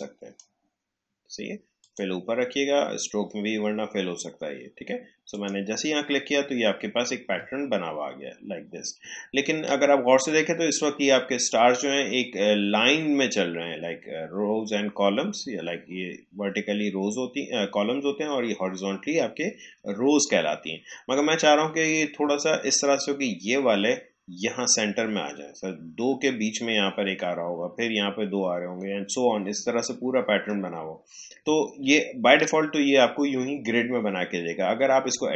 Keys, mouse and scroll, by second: 5.3 click, 7.5-7.8 alt+scroll up 1, 16.6 space, 22.1 space, 31.5 alt+scroll down 1.